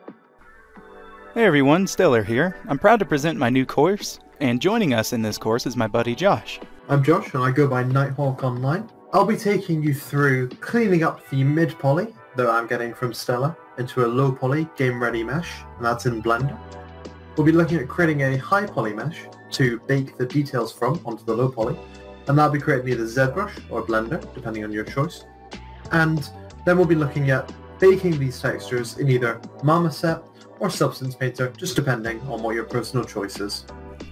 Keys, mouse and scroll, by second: 0.1 scroll down 1, 0.1 middle click, 0.4 click, 0.5 scroll up 1, 0.7 click, 0.7 scroll down 2, 0.8 click, 1.0 middle click, 1.2 g, 1.3 click, 1.9 click, 2.1 shift+middle click, 2.3-4.1 typing, 2.4 click, 2.4 scroll up 1, 2.4 shift+middle click, 2.6 shift+click, 2.6 scroll down 1, 3.0 click, 3.1 Tab, 3.4 click, 3.7 shift+click, 3.9 click, 4.2 shift+click, 4.3 click, 4.5 middle click, 4.7 Tab, 4.8 click, 5.1 alt+w, 5.5 scroll down 1, 5.9 g, 5.9 d, 6.0 a, 6.1 click, 6.1 Tab, 6.3 middle click, 6.4 click, 6.5 middle click, 6.8 click, 6.8 scroll up 2, 7.2 middle click, 7.8 scroll down 1, 7.9 right click, 8.1-14.2 typing, 8.4 click, 8.9 middle click, 9.0 click, 9.7 click, 9.8 click, 9.9 shift+middle click, 10.2 scroll up 1, 10.3 shift+middle click, 10.4 shift+click, 10.6 shift+middle click, 11.3 shift+click, 11.7 shift+click, 12.0 shift+click, 12.1 middle click, 12.1 Tab, 12.2 middle click, 12.3 click, 12.5 middle click, 12.5 scroll down 1, 12.6 shift+middle click, 13.0 click, 13.0 middle click, 13.5 shift+click, 13.8 shift+click, 13.9 shift+middle click, 14.0 scroll down 1, 14.4 shift+click, 14.5 middle click, 15.3 scroll up 1, 15.5 middle click, 15.6 click, 15.6 middle click, 15.8 ctrl+click, 15.8 middle click, 15.9 e, 16.1 shift+click, 16.4 middle click, 16.5 Tab, 16.6 middle click, 17.1 scroll up 1, 17.1 scroll down 2, 17.2 Tab, 17.3 shift+middle click, 17.3 3, 17.4 click, 17.7 shift+middle click, 17.7 e, 17.9 shift+click, 18.0 shift+middle click, 18.1 middle click, 18.2 middle click, 18.4 shift+middle click, 18.4 middle click, 18.7 click, 18.9 q, 19.1 middle click, 19.2 shift+middle click, 19.3 h, 19.4 ctrl+click, 19.5 scroll down 1, 19.5 middle click, 19.7 shift+middle click, 19.9 click, 20.0 shift+middle click, 20.1 d, 20.2 click, 20.5 middle click, 20.7 click, 20.7 scroll down 1, 20.8 shift+middle click, 20.9 click, 21.0 scroll up 1, 21.1 middle click, 21.1 scroll, 21.5 click, 21.5 middle click, 21.9 click, 22.0 s, 22.0 click, 22.3 shift+middle click, 22.4 s, 22.6 q, 22.8 middle click, 22.8 shift+middle click, 22.9 click, 23.1 g, 23.1 click, 23.3 middle click, 23.6 scroll down 2, 23.8 Tab, 23.9 click, 24.4 click, 24.5 middle click, 24.6 b, 24.7 middle click, 25.0 click, 25.0 middle click, 25.2 click, 25.5 click, 25.6 scroll up 1, 25.7 middle click, 25.9 click, 25.9 scroll down 1, 26.0 middle click, 26.1 scroll up 1, 26.3 shift+middle click, 26.3 scroll down 2, 26.3 shift+middle click, 26.5 click, 26.7 middle click, 26.8 scroll up 1, 26.9 g, 27.1 click, 27.1 scroll, 27.2 middle click, 27.3 click, 27.5 middle click, 28.0 g, 28.3 ctrl+z, 28.4 middle click, 28.5 middle click, 28.7 shift+middle click, 28.7 middle click, 28.7 Tab, 28.9 click, 29.1 middle click, 29.2 click, 29.4-33.8 typing, 29.5 middle click, 29.5 click, 29.6 Tab, 29.7 scroll down 1, 29.9 click, 30.1 click, 30.4 ctrl+z, 30.6 click, 30.9 scroll down 1, 31.0 shift+middle click, 31.2 click, 31.2 shift+middle click, 31.3 middle click, 31.5 middle click, 31.7 shift+click, 31.7 shift+middle click, 31.8 shift+click, 31.9 shift+middle click, 32.5 Tab, 32.7 middle click, 32.8 click, 32.9 middle click, 33.0 middle click, 33.1 middle click, 33.3 middle click, 33.6 scroll up 1, 33.7 click, 33.9 shift+click, 34.0 middle click.